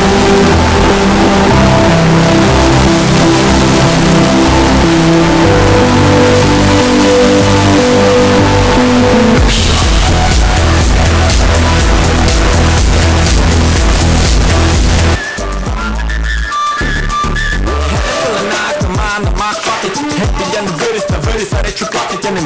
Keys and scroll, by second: 15.1 Page_Down.